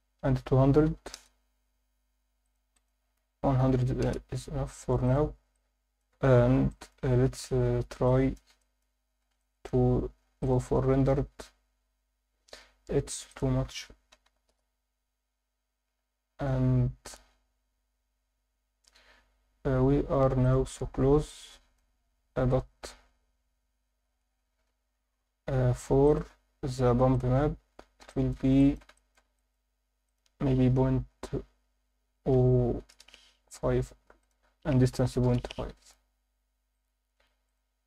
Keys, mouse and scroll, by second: 0.8 0, 2.5 click, 2.7-4.0 drag, 3.8 0, 5.0 click, 6.3 scroll down 1, 6.7 alt+middle drag, 7.2-7.9 scroll up 5, 8.1 alt+middle click, 8.6 alt+shift+middle drag, 9.4 ctrl+alt+middle drag, 11.0 click, 13.3-14.5 drag, 15.9 scroll up 2, 18.8 scroll down 2, 19.8 scroll up 1, 20.4 click, 21.3-21.8 alt+middle drag, 26.0-27.4 drag, 28.1 alt+shift+middle click, 28.6 ctrl+alt+middle click, 28.9 alt+shift+middle click, 29.3 ctrl+alt+middle click, 30.0-32.9 drag, 34.2-35.3 drag, 36.7-37.8 drag.